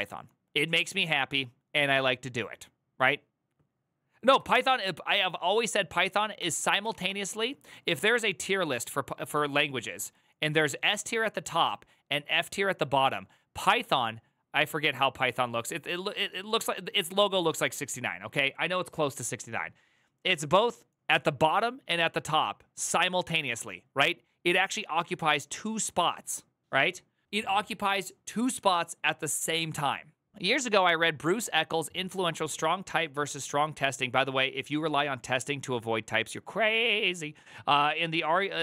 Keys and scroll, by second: 4.2 alt+[, 6.2 alt+=, 6.6 ctrl+n, 6.7 Return.